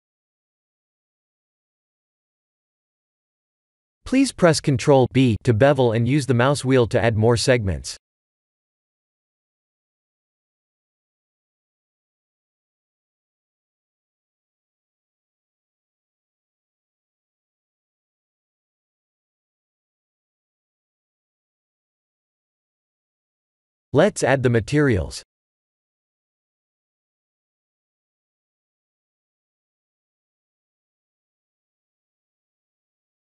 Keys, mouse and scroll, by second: 1.6 middle click, 2.6 shift+z, 3.0 middle click, 4.7 ctrl+b, 10.7 ctrl+r, 12.8 Tab, 13.3 middle click, 14.4 right click, 15.2 middle click, 16.1 click, 16.4 middle click, 17.2 middle click, 19.6-20.2 scroll down 3, 20.6 middle click, 22.1 click, 22.6-23.2 scroll up 3, 23.3-23.8 scroll down 1, 24.3 click, 24.7 click, 25.6 click, 26.2 click, 27.5 click, 28.0 click, 30.6 click, 32.9 click.